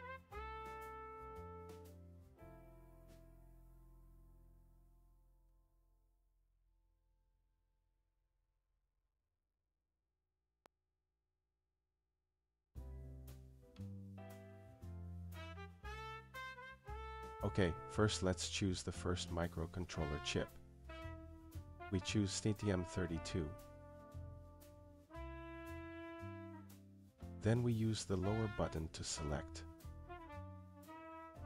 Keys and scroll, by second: 2.2 Return, 20.0 Down, 20.8 Return, 28.2 Down, 30.5 Return.